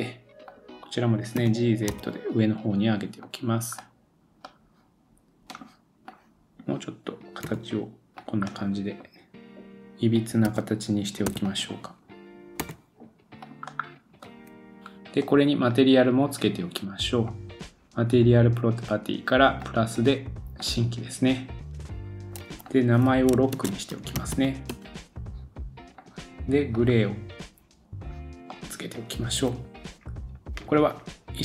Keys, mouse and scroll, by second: 0.4 click, 1.4 g, 3.8 middle click, 5.5 click, 6.1-8.2 drag, 7.4 g, 8.2-11.4 middle drag, 10.4 2, 11.2 3, 11.4 click, 11.6-17.2 middle drag, 12.6 g, 14.2 scroll up 1, 14.8 Tab, 14.8-15.4 scroll down 2, 17.2 click, 17.4-19.6 middle drag, 19.6-26.0 drag, 26.0 middle click, 28.5-31.4 middle drag, 29.9-30.5 scroll down 2.